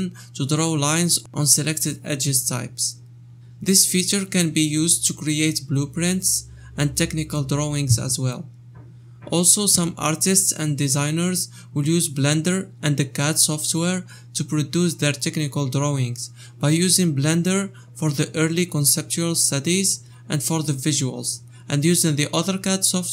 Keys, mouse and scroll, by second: 0.0 click, 0.8 shift+click, 1.4 click, 4.6 click, 8.5 click, 8.7 shift+middle click, 8.9 click.